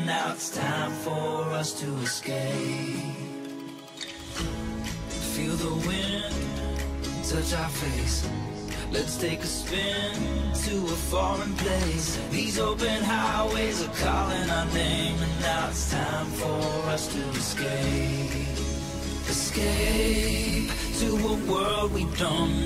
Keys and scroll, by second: 0.4 ctrl+alt+shift+e, 9.2 ctrl+j, 22.4 ctrl+alt+shift+e.